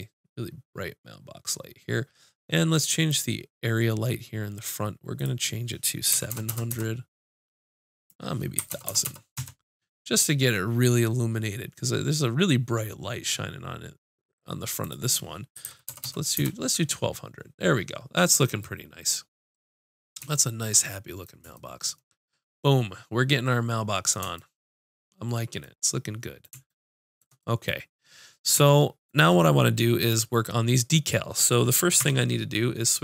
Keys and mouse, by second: 3.1-5.0 drag, 5.2-7.1 drag, 6.5 KP_0, 8.0-12.2 drag, 8.9 KP_0, 9.0 KP_0, 14.8-16.3 drag, 16.0 KP_0, 30.0-32.0 drag, 32.0 Tab.